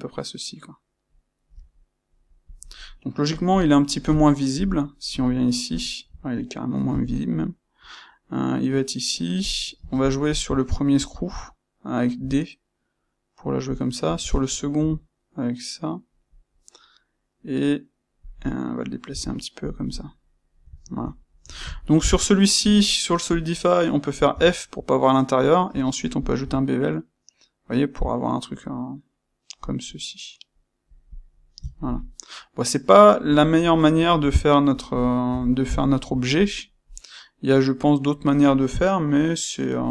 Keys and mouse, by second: 2.4 click, 4.4 KP_1, 5.2 ctrl+middle click, 6.8 typing, 9.4 click, 9.7 space, 18.2 click, 19.0 typing, 19.6 click, 19.7 middle click, 21.0-22.5 middle drag, 22.5 space, 23.3 space, 31.1 click, 31.6-39.9 ctrl+middle drag.